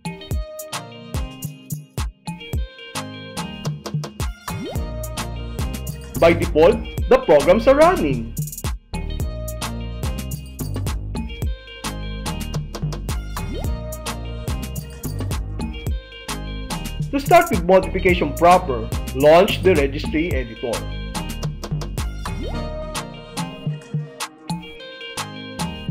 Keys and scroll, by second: 0.1 super+r, 3.9 Return, 9.4 ctrl+w, 10.8 Escape, 15.1 Return, 21.1 super+r.